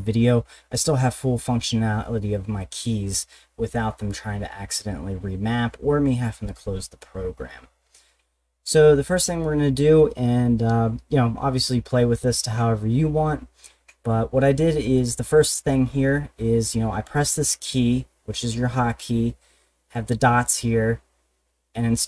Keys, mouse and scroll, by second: 15.0 click, 19.9 click.